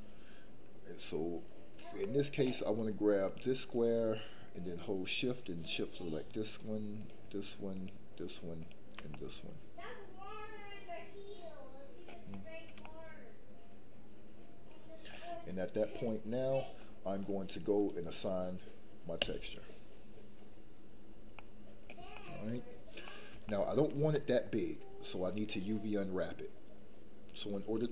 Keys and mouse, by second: 2.0 middle click, 3.2 click, 5.6 shift+click, 8.6 shift+click, 9.1-12.0 middle drag, 12.3 shift+middle click, 12.8-15.1 middle drag, 19.1 click, 21.3 middle click, 22.1 shift+middle click, 23.0 middle click, 23.4 shift+middle click, 24.1 middle click.